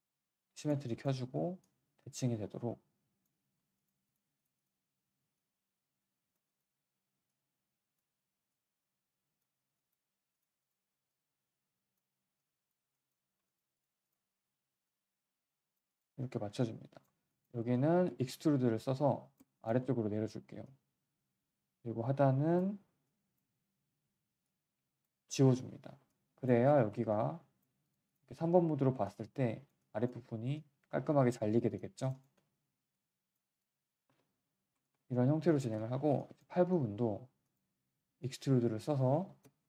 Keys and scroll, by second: 19.8 w, 23.8 r, 25.2 Delete, 26.6 3, 27.7 q, 28.3 r, 28.5 r, 32.3 r, 34.0 1.